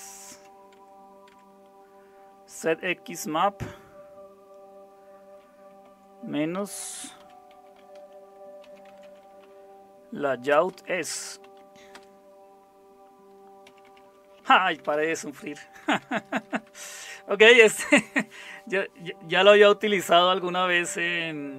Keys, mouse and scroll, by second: 0.3-1.3 typing, 5.8 typing, 7.5-11.9 typing, 13.6-17.0 typing.